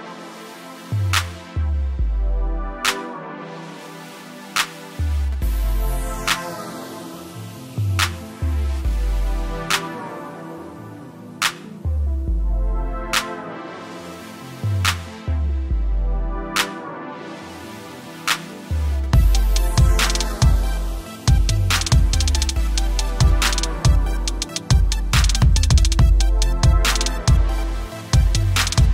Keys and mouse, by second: 0.4 click, 0.9 right click, 1.8 click, 3.6 typing, 5.7 click, 8.3 ctrl+0, 9.0 =, 10.5 click, 14.6 click, 15.7 KP_4, 15.9 Tab, 16.8 KP_4, 17.2 Tab, 19.0 KP_3, 20.4 click, 23.7 click, 25.2 click.